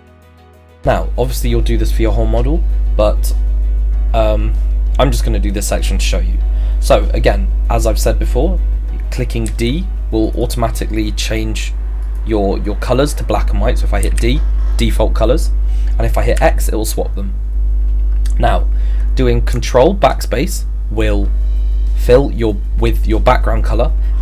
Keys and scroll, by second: 9.5 d, 16.4 x.